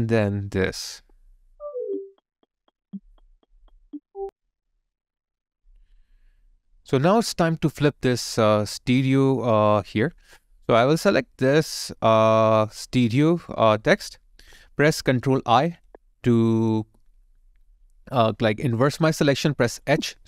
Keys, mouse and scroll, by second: 4.2 alt+middle click, 4.7 alt+click.